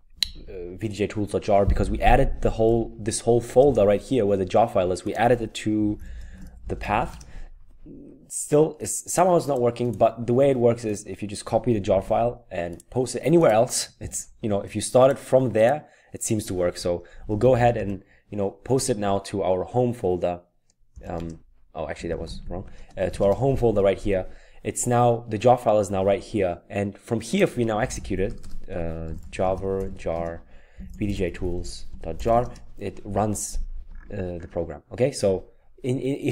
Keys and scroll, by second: 0.0-0.7 typing, 5.5-7.3 typing, 11.9 ctrl+c, 14.0 ctrl+v, 16.9-17.8 typing, 17.7 Return, 20.7-23.5 typing, 27.8 typing, 28.9-32.7 typing.